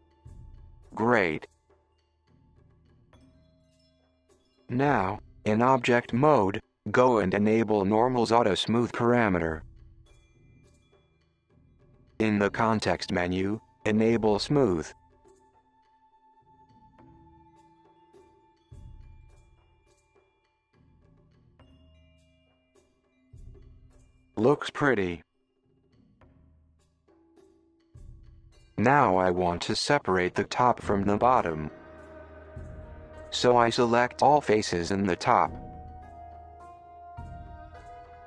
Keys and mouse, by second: 4.2 Tab, 5.1 click, 5.7 click, 6.6 click, 7.4 click, 8.2 click, 8.8 click, 9.5 click, 10.0-10.4 drag, 10.6 click, 11.9-13.1 right drag, 14.3-15.4 middle drag, 15.9 click, 16.6-18.8 middle drag, 19.2 click, 20.3-28.3 middle drag, 28.3 Tab, 28.8 alt+click, 29.3 KP_1, 29.4 click, 29.6 shift+click, 29.9 alt+click, 30.0 click, 30.2 shift+click, 30.3 shift+click, 30.6 shift+click, 30.9 shift+click, 31.0 shift+click, 31.1 shift+click, 31.8 shift+click, 32.1 shift+click, 32.3 super+click, 32.5 alt+click, 33.1 click, 33.2 alt+click, 33.4 alt+click, 33.8 alt+shift+click, 34.0 middle click, 34.3 alt+shift+click, 34.6 middle click, 34.8 alt+shift+click, 35.2 alt+shift+click, 35.6 alt+shift+click, 36.2 alt+shift+click, 36.7 alt+shift+middle click, 37.0 alt+shift+click, 37.3 middle click.